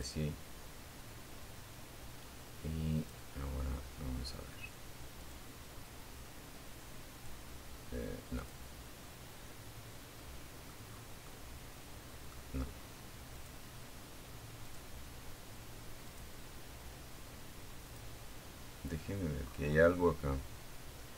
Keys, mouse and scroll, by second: 1.2 click, 3.4 click, 5.3 click, 6.6 click, 8.4 middle click, 9.1 scroll down 1, 9.4-10.5 middle drag, 11.5 click, 12.8 click, 14.2 click, 16.0 click, 17.6-18.1 scroll up 1, 18.1-19.2 middle drag, 19.5 click, 20.8 click.